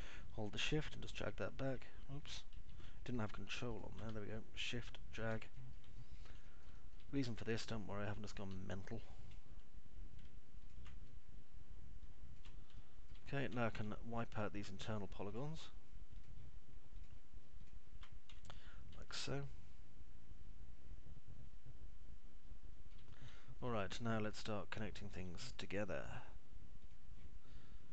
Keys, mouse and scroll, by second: 0.8 w, 1.8 shift+click, 3.6 ctrl+z, 5.8 shift+click, 6.6 middle click, 6.9 alt+middle click, 7.4 middle click, 12.9 shift+click, 13.8 alt+middle click, 14.3 middle click, 14.6 alt+middle click, 19.3 Delete, 19.9-23.8 alt+middle drag, 23.9 middle click, 24.4 alt+middle click, 24.9 click, 25.8 alt+middle click, 26.4 alt+middle click.